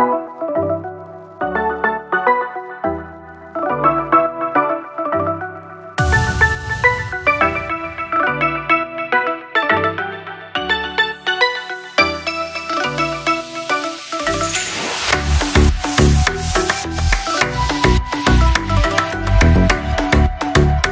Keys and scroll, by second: 7.1 ctrl+[, 7.8 [, 8.9 ctrl+[.